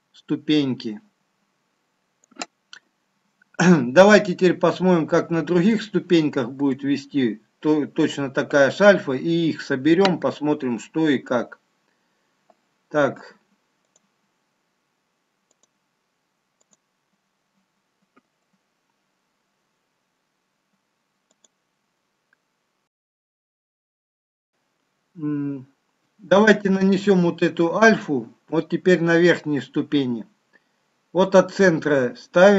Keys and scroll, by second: 24.5 ctrl+d.